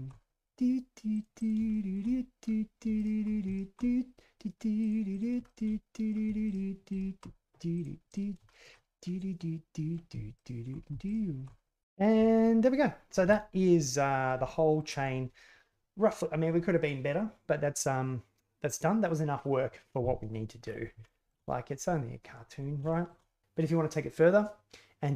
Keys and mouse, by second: 0.3 shift+middle click, 1.0 click, 1.5 click, 1.8 click, 2.0 middle click, 2.1 middle click, 3.3 ctrl+KP_Add, 4.1 click, 4.5 shift+click, 4.8 alt+z, 4.8 click, 5.2 shift+click, 5.4 shift+click, 5.7 shift+click, 6.4 shift+click, 6.8 click, 7.5 click, 7.6 click, 7.9 ctrl+KP_Add, 8.2 l, 8.3 ctrl+z, 8.5 space, 8.9 ctrl+KP_Add, 9.1 ctrl+KP_Add, 9.3 shift+click, 9.7 ctrl+KP_Add, 10.1 ctrl+KP_Add, 10.5 ctrl+KP_Add, 10.5 click, 10.9 ctrl+KP_Add, 11.1 ctrl+KP_Add, 11.5 click, 11.7 Tab, 13.2 z, 14.4-14.8 shift+middle drag, 21.0 shift+middle drag, 22.8 shift+middle drag.